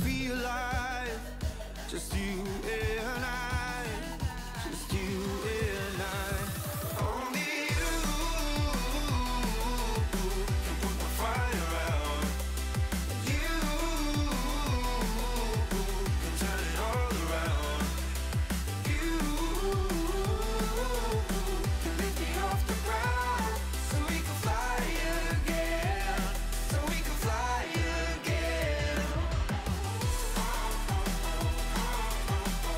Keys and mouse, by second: 0.9 space, 1.3 click, 2.0 ctrl+[, 3.0 ctrl+[, 3.4 ctrl+], 4.0 click, 5.3 click, 6.0 click, 7.4 space, 7.7 click, 11.1 click, 12.2 Delete, 13.0 click, 15.0 click, 15.8 click, 17.8 click, 21.3 click, 27.6 Left, 28.6 click, 29.4 click, 29.7 click, 30.1 Return, 30.4 click, 31.3 space, 31.8 click.